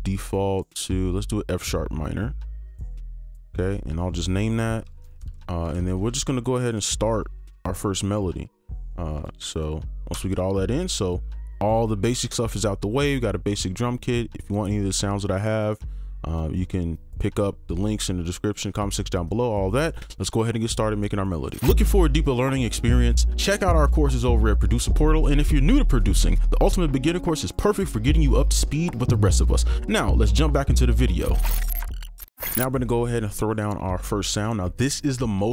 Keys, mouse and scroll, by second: 2.9 double click, 14.5 scroll up 1.